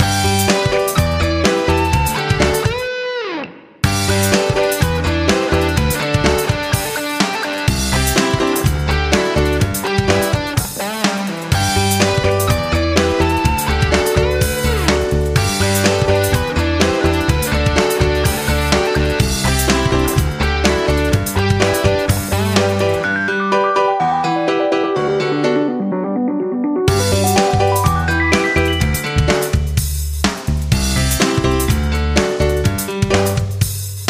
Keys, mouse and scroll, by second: 8.6 Right, 8.8 Right, 9.0 Right, 11.8 F9, 12.7 click, 16.1 typing, 17.9-18.6 typing, 19.2 Return, 20.3 click, 22.6 3, 24.2-24.9 typing, 25.1 Return, 27.1 click.